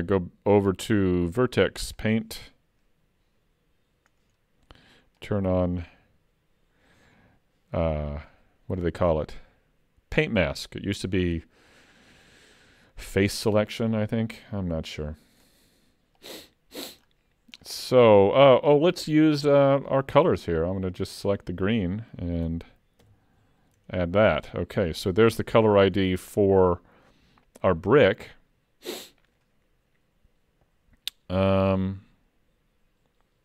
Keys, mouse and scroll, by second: 0.6 click, 5.3 click, 15.0-16.2 scroll up 15, 16.2 click, 17.0-18.2 scroll down 8, 21.1 click, 23.1 shift+k, 24.3 middle click, 27.9 scroll down 1, 28.1 middle click.